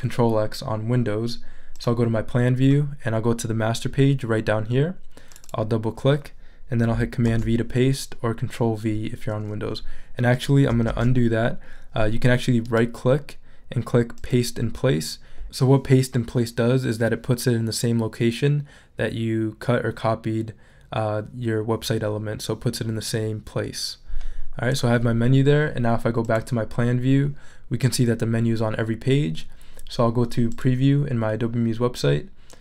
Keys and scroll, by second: 7.3 super+v, 10.9 super+z.